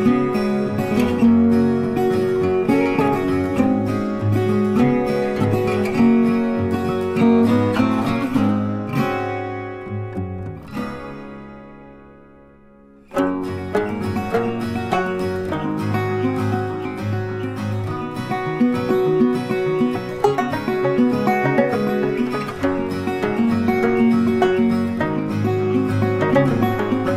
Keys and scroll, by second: 5.9 ctrl+t, 14.0 ctrl+t.